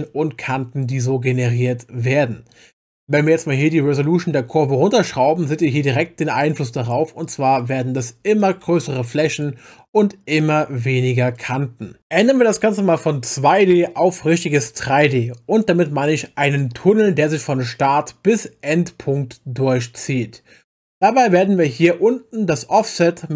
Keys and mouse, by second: 6.4 click, 6.8 click, 7.2 click, 7.6 click, 8.0 click, 8.4 click, 8.8 click, 9.3 click, 9.9 click, 10.4 click, 11.3 click.